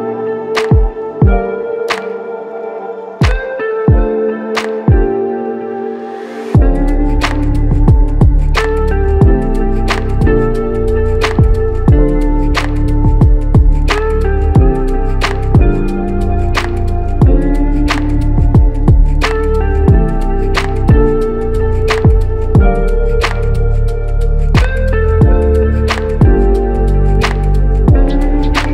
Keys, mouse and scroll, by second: 3.9 alt+click, 14.9 ctrl+click, 22.0 q, 24.1 typing, 26.4 shift+click.